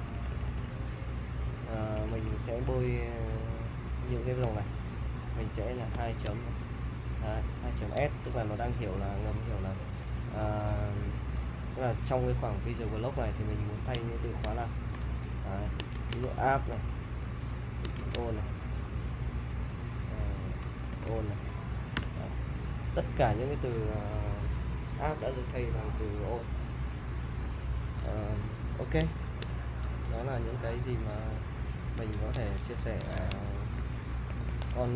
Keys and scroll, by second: 0.0-2.5 typing, 5.9 shift+;, 8.0 s, 11.2 ,, 14.9-16.7 typing, 17.4 Tab, 18.0-21.6 typing, 22.0 Return, 29.2 :, 30.5-31.3 typing, 32.3 super+Tab, 33.0 super+Tab, 33.2 super+Tab, 34.3 super+Tab.